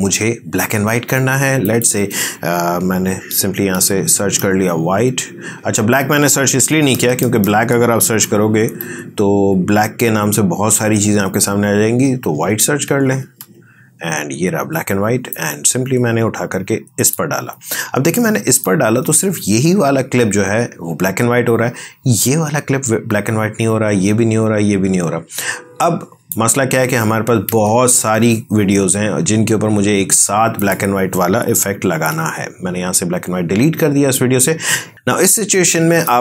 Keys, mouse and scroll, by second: 3.7-4.3 typing, 6.5 BackSpace, 8.1-9.7 typing, 11.3-13.3 typing, 15.2-28.5 drag, 30.5 click, 31.9 Delete, 34.9-36.2 drag.